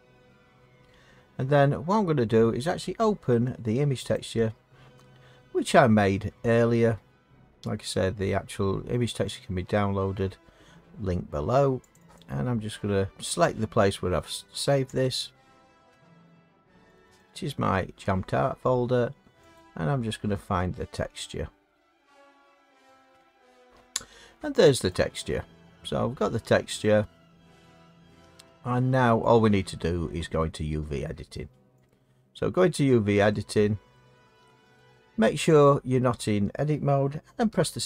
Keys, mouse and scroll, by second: 2.6 scroll, 4.1 click, 5.7-6.2 scroll down 3, 6.4-7.3 scroll down 7, 8.0-8.3 scroll, 11.9 click, 12.1 click, 13.1 click, 14.0-14.8 scroll, 14.8 scroll, 15.0 click, 15.4-15.7 scroll down 1, 15.7-16.1 scroll down 1, 16.1 scroll down 1, 16.3-16.9 scroll down 1, 16.9-18.5 drag, 18.5 scroll down 1, 18.5-18.9 scroll down 1, 18.9-19.4 scroll down 1, 19.4 scroll down 1, 19.6 click, 19.9 scroll, 19.9 scroll down 1, 20.2-20.6 scroll down 1, 20.6-21.7 scroll, 21.7-23.0 scroll, 23.0-23.5 scroll, 24.6 click, 24.9 click, 28.1 middle click, 29.2 middle click, 31.9 click, 33.9 middle click, 34.7 Tab, 36.2 middle click, 37.5 7.